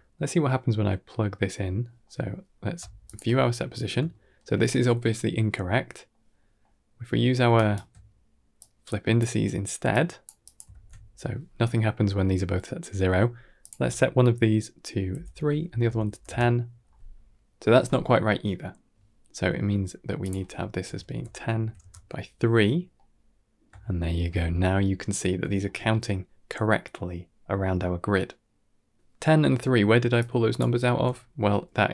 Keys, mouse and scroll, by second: 0.9 middle click, 1.4 middle click, 1.9 middle click, 2.9 alt+shift+click, 4.0 shift+middle drag, 5.5 middle click, 6.3 middle click, 7.4 ctrl+right click, 8.4-9.0 drag, 9.8 click, 10.3 click, 10.6 ctrl+x, 11.9-12.4 scroll up 4, 12.4 middle click, 13.5 click, 15.4 click, 19.4 middle click, 20.1-21.7 drag, 22.8-23.5 middle drag, 23.8 shift+middle drag, 25.4 shift+middle click, 28.3-29.2 scroll down 3, 29.2 scroll down 2, 29.4 middle click, 30.1-30.5 drag, 30.7 x, 31.0-31.5 middle drag.